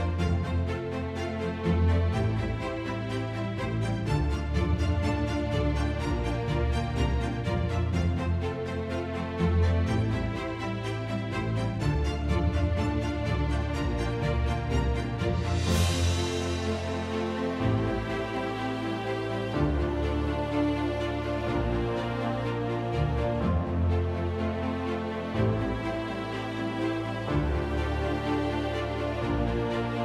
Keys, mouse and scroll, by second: 0.2 click, 1.3 click, 2.0 click, 3.8 click, 4.2 =, 7.1 click, 8.1 click, 8.9 click, 10.7 click, 11.2 click, 11.6 click, 12.5 -, 14.5 click, 15.2 click, 16.5 click, 18.2 click, 19.3 click, 20.3 click, 21.6 click, 22.8 click, 23.4 click, 24.2 click, 25.5 click, 25.9 click, 26.8 click, 27.7 F1, 27.9 click, 28.6 click, 29.3 shift+click, 29.6 shift+click.